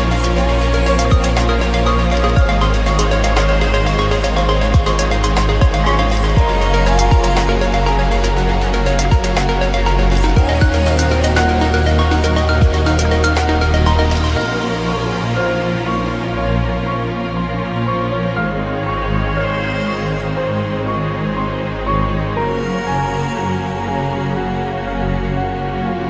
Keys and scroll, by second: 13.8 g.